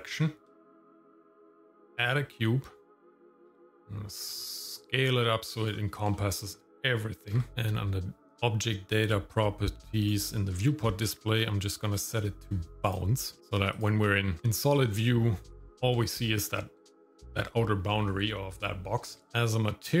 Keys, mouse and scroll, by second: 0.5 shift+middle click, 1.0 scroll down 2, 1.7 shift+middle click, 1.9 shift+a, 3.4 shift+s, 6.3 shift+middle click, 7.2 g, 7.5 click, 10.0 click, 10.5-11.3 scroll down 2, 11.3-11.9 scroll down 3, 11.9-13.0 drag, 14.0 click, 14.4 shift+middle click, 14.4-15.2 scroll up 2, 15.2 middle click, 15.6-15.9 scroll down 1, 16.0 shift+middle click, 16.9 shift+middle click, 19.3 click.